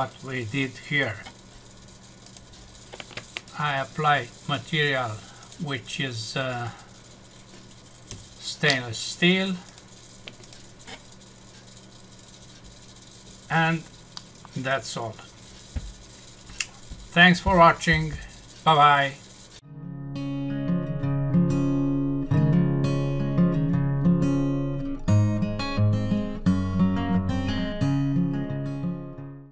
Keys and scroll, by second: 14.1 F6.